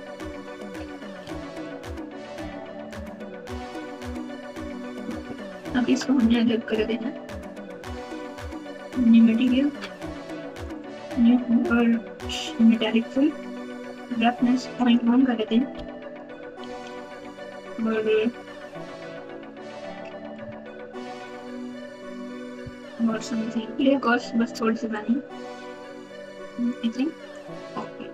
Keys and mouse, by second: 0.3 3, 1.2 alt+z, 1.8 click, 2.9-4.0 drag, 4.7 alt+z, 6.4 Tab, 7.2 Tab, 8.1 Tab, 9.4 click, 13.6 click, 14.7-16.6 drag, 20.4 z, 21.5 z, 25.0-26.7 drag, 27.3 click.